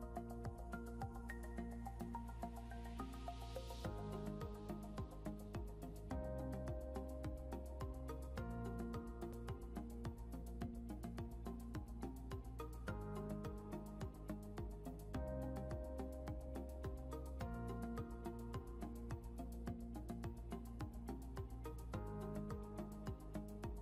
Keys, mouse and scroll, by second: 8.6 click.